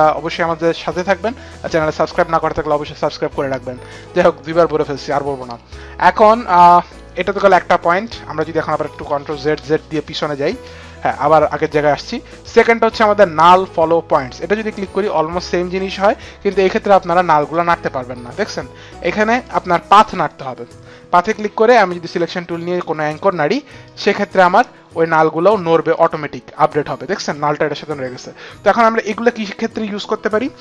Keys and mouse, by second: 3.7 click, 5.6 click, 9.0 ctrl+z, 9.4 ctrl+z, 9.8 ctrl+z, 14.1 click, 17.3 click, 19.2 click, 22.6 click, 23.6 click, 25.7 click.